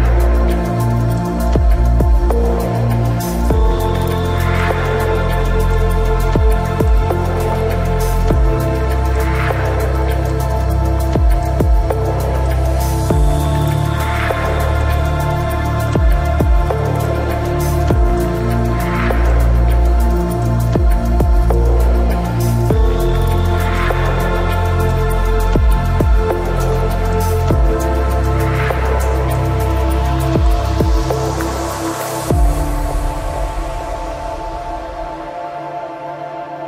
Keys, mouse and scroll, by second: 3.2-6.4 drag, 3.2-4.6 right drag, 3.6 ctrl+Tab, 4.9 c, 12.2-14.0 right drag, 13.2 i, 14.6 middle click, 15.0 z, 15.7 KP_Decimal, 17.9 KP_3, 18.5 z, 22.5 ctrl+r, 23.6 ctrl+Tab, 24.2-26.4 right drag, 25.8 i, 26.4 click, 26.6 z, 26.8-29.1 middle drag, 28.1 click, 28.9 right click, 30.6 right click, 31.5 KP_3, 31.9 Tab, 32.5 ctrl+s, 32.8 z, 33.5 Tab, 34.8 right click, 35.6 c.